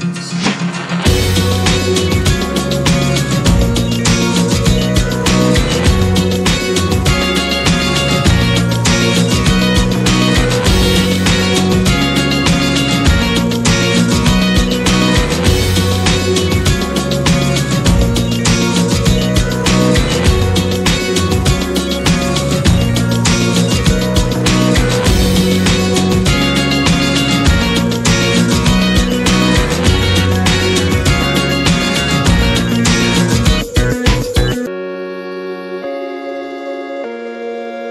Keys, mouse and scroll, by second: 0.8-2.6 drag, 2.8-3.8 middle drag, 3.8-4.2 scroll up 1, 4.2-5.4 middle drag, 5.4 scroll up 1, 5.4-7.5 middle drag, 7.5 scroll down 3, 7.7 click, 8.8 click, 9.1 scroll down 3, 9.3-10.0 middle drag, 10.0 click, 11.7 ctrl+z, 11.9 s, 13.0-14.0 middle drag, 14.0 click, 14.4 Delete, 15.0-19.2 drag, 19.4 scroll up 2, 19.7 middle click, 20.0-20.3 scroll down 2, 20.3 shift+middle click, 20.7 click, 22.3 ctrl+1, 22.4 scroll up 1, 22.7 click, 23.0-27.2 middle drag, 27.2 drag, 28.0 Delete, 28.8-33.7 drag, 34.2-37.7 drag, 37.8-37.9 drag.